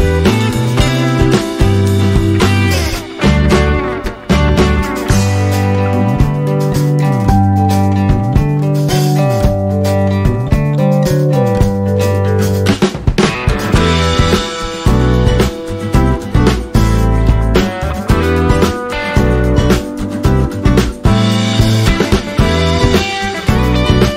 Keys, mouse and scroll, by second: 0.1 click, 4.7 click, 6.8 alt+scroll down 1, 7.8 click, 8.7-11.7 typing, 11.7 click, 14.7 click, 15.9 space, 16.1 click, 16.3 space, 17.4 alt+scroll up 1, 17.8-20.3 drag, 20.4 click, 22.1 alt+scroll down 1, 22.9 right click.